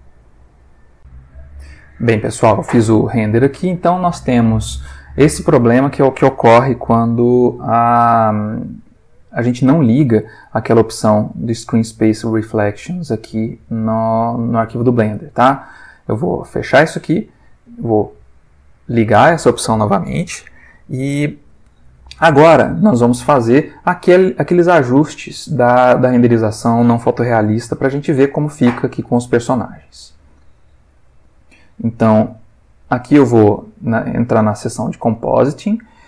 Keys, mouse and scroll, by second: 0.0 click, 1.0 click, 16.3 click, 18.5 click, 34.3 click, 35.7-36.0 ctrl+middle drag.